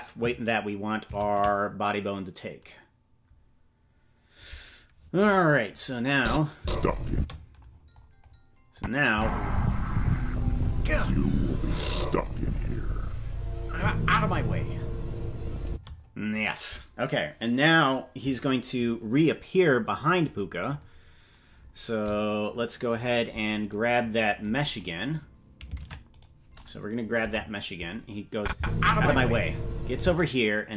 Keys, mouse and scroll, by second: 3.2 ctrl+s, 6.1 click, 6.5 space, 7.1 space, 7.7-8.9 scroll down 12, 8.7 click, 9.1 space, 15.6 space, 20.8-21.6 scroll down 3, 21.6-21.9 scroll up 4, 22.9-23.7 scroll down 4, 24.8 right click, 25.8 ctrl+Tab, 26.1 right click, 27.1 KP_0, 28.3 click, 28.5 space, 30.0 space.